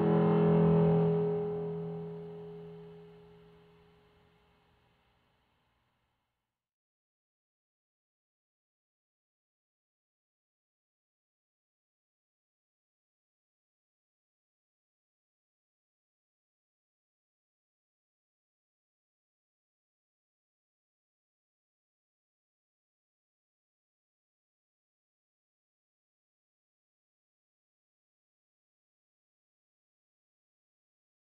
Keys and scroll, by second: 0.9 ctrl+0, 3.7 ctrl+x, 3.9 ctrl+shift+v, 7.2 ctrl+=, 12.9 ctrl+0, 18.0 ctrl+x, 18.2 ctrl+shift+v, 27.4 shift+Up, 29.5 ctrl+0.